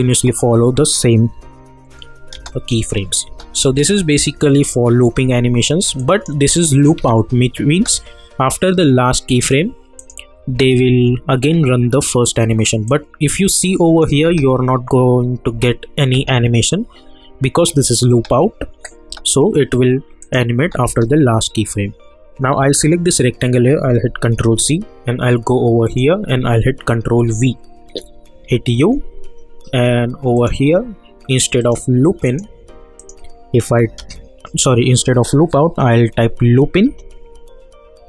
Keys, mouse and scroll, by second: 1.3 -, 2.3 space, 6.0 click, 6.9 space, 10.0 click, 10.5 space, 12.8-14.2 drag, 14.2 space, 20.2 click, 20.6 space, 22.8 click, 24.3 ctrl+c, 25.8 click, 27.1 ctrl+v, 28.4 u, 30.3 click, 36.8 Return.